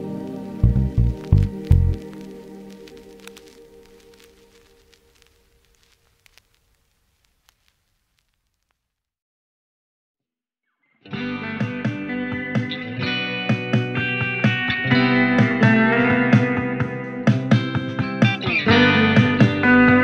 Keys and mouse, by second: 0.0 middle click, 0.9-12.2 drag, 6.4 g, 7.7 ctrl+z, 12.2 ctrl+z, 12.2 ctrl+click, 12.8 g, 13.4 g, 14.0 f, 19.0-20.0 drag.